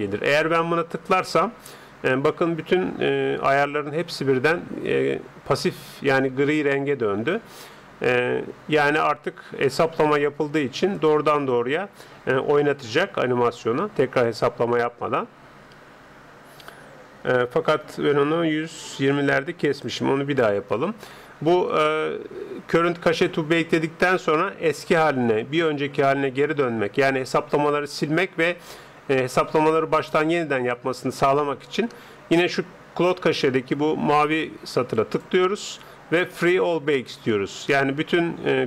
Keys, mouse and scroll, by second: 0.9-2.7 drag, 10.1-12.7 drag, 18.9-21.4 drag, 34.9-38.5 drag.